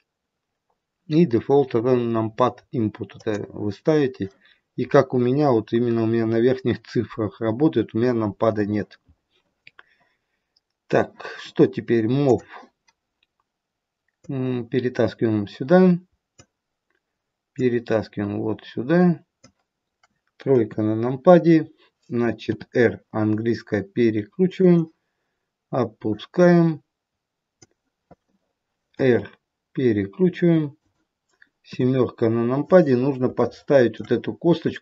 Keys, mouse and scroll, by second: 12.2 click, 14.3 click, 17.5 click, 20.5 KP_3, 22.5 r, 28.9 r, 31.6 KP_7, 32.7-33.3 scroll up 4, 33.3 shift+middle click.